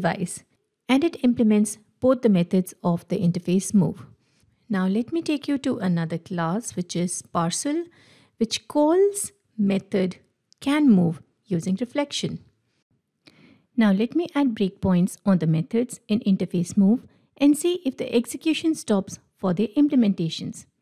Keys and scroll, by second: 4.4 Escape, 6.2 Escape, 6.4 ctrl+Tab, 12.2 ctrl+w, 13.6 ctrl+F8.